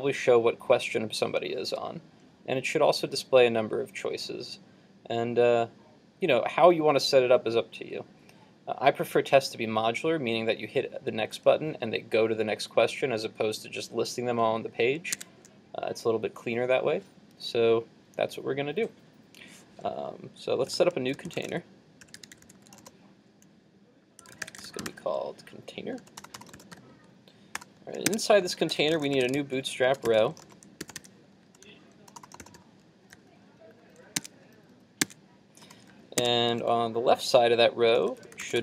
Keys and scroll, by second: 15.2 super+Tab.